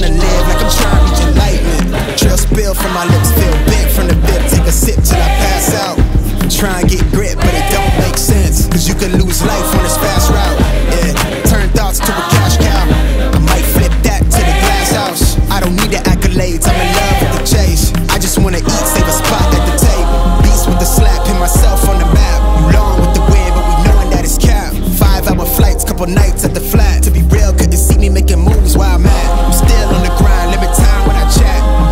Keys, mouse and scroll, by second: 3.3 click, 6.4 right click, 10.2-17.0 drag.